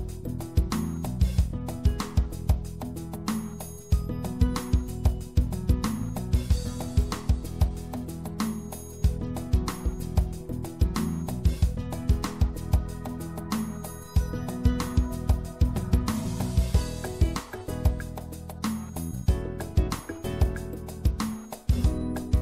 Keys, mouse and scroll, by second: 1.9 z, 5.0 middle click, 6.3 z, 8.1 c, 9.5 middle click, 10.6 click, 11.6 middle click, 12.9 z, 14.0-16.0 drag, 18.5-22.4 middle drag.